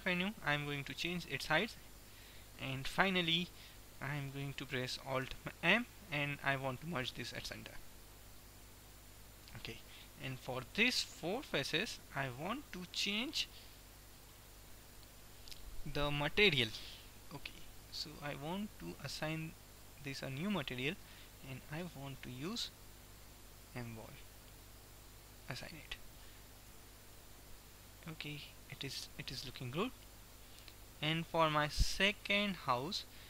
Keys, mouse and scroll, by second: 1.0 g, 5.4 alt+m, 7.9 middle click, 10.7-16.0 middle drag, 19.9-23.5 drag, 25.7-29.0 drag, 26.9 Tab, 32.5-33.2 drag.